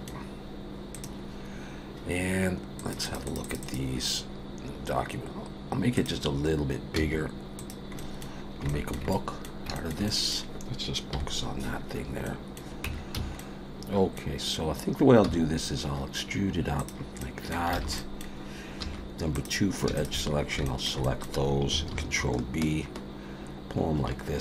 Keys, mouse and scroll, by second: 8.0 middle click, 8.4 scroll up 2, 8.7 shift+middle click, 9.1 middle click, 9.7 shift+middle click, 10.1 middle click, 11.1 /, 11.9-12.2 scroll down 2, 12.2 middle click, 12.8 Tab, 13.1 a, 13.4 middle click, 15.2 e, 17.2 middle click, 17.7 alt+a, 18.0 middle click, 18.8 2, 19.3 click, 19.9 shift+click, 20.3 scroll up 3, 20.6 shift+middle click, 21.0 middle click, 21.9 ctrl+b.